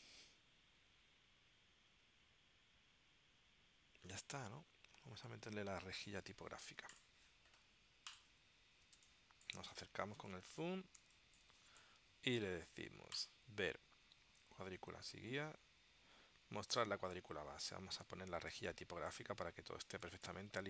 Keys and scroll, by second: 9.1 space, 10.3 space, 18.6 space.